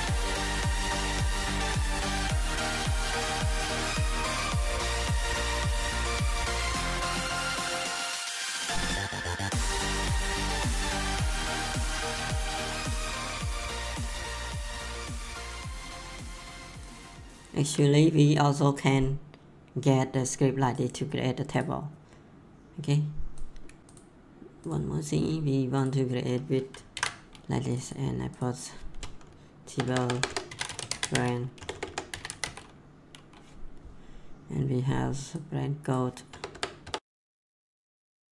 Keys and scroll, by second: 0.7-1.6 typing, 8.5 Left, 8.7-9.7 typing, 26.9 ctrl+v, 28.9 BackSpace, 30.2-32.8 typing, 36.3 BackSpace.